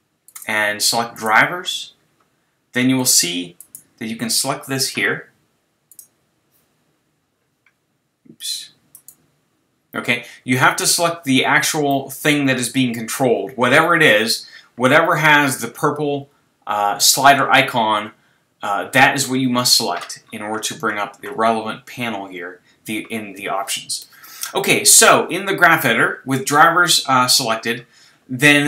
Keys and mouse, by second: 3.0-5.3 drag, 5.9-7.7 drag, 9.0-10.9 right drag, 11.9-27.0 middle drag.